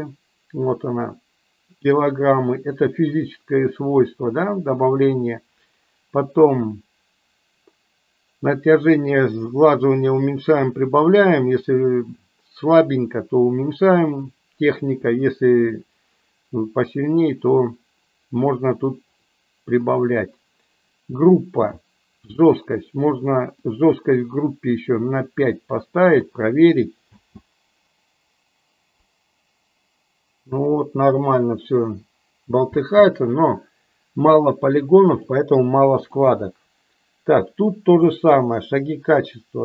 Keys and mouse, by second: 23.6-26.2 drag, 27.0 space, 33.0 space, 35.1 click, 36.0 click, 38.1-39.6 drag.